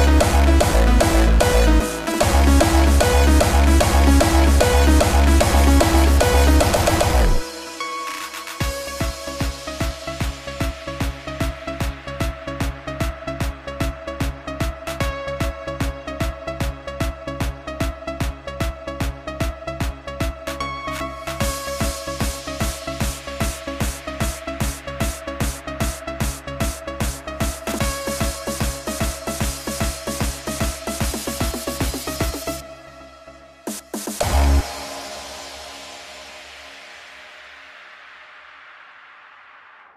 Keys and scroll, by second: 0.2 super+z, 1.4 super+z, 1.9 super+z, 2.5 super+z, 2.9 super+z, 4.6 super+z, 5.1 super+z, 5.7 super+z, 6.2 super+z, 8.0 super+z, 9.8 x, 19.5 x, 24.5 x, 38.8 alt+super+z, 39.3 alt+super+z, 39.7 alt+super+z.